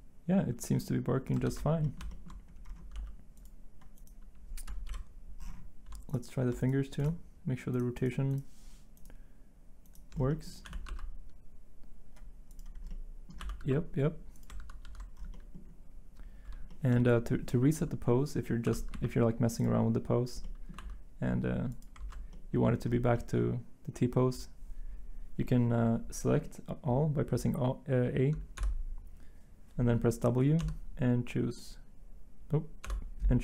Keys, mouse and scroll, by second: 1.4 ctrl+z, 1.4 r, 2.9 g, 4.9 Delete, 10.6 r, 13.4 r, 13.6 x, 14.5 ctrl+z, 14.8 ctrl+z, 18.6 r, 18.9 x, 20.8 r, 22.0 ctrl+z, 22.0 r, 28.6 a, 30.6 w, 32.8 w.